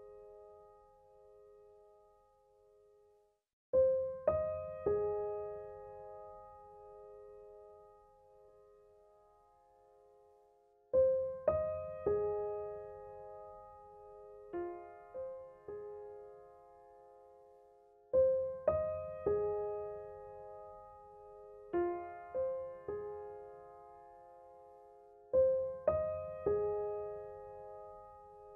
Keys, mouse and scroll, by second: 4.0 ctrl+=, 5.7 space, 5.9 click, 6.2 space, 9.8 click, 10.0 space, 12.1 click, 12.4 space, 19.3 ctrl+=, 20.6 ctrl+-, 23.7 space, 24.0 click, 24.2 space, 26.0 click, 26.1 click.